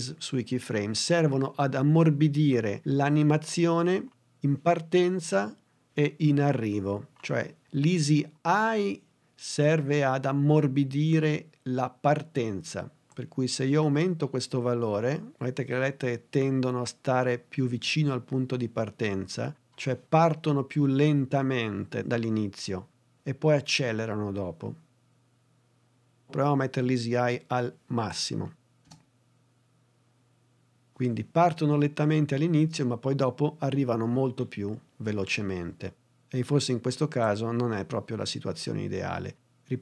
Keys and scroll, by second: 28.8 space.